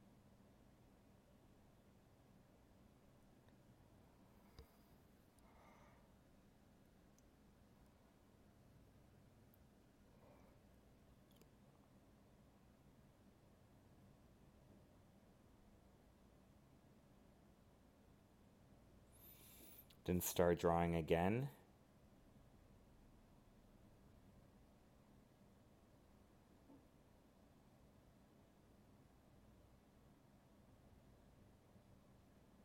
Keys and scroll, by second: 0.7 alt+space, 6.1 ctrl+z, 8.3 alt+space, 10.9 ctrl+z, 12.4 alt+space, 15.8 alt+space, 18.9 alt+space, 21.3 alt+space, 24.8 ctrl+z, 26.4 alt+space, 27.9 ctrl+z, 31.3 ctrl+z, 31.5 alt+space, 32.2 ctrl+z.